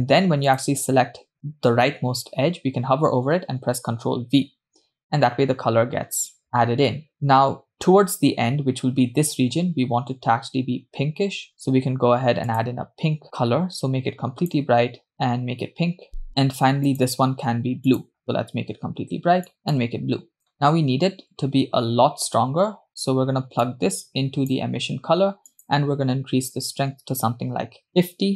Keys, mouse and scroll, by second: 0.5 click, 4.2 ctrl+v, 11.5-11.9 drag, 13.2 click, 16.9-17.4 drag, 18.7 click, 23.7 click, 23.9-25.0 drag, 26.5-28.3 drag.